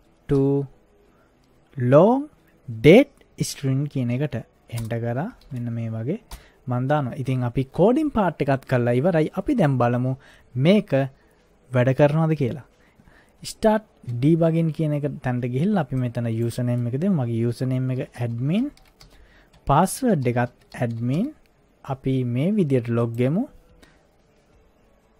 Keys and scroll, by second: 0.3 o, 4.8 Return, 5.1-6.3 typing, 17.8-21.7 typing, 19.6 Tab.